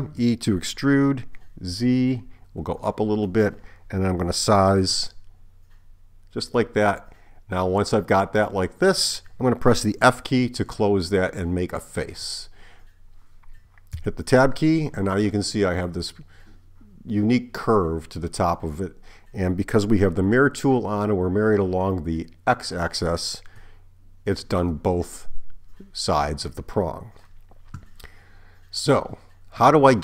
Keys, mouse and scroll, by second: 0.2 e, 4.8 s, 12.2 f, 14.0 Tab.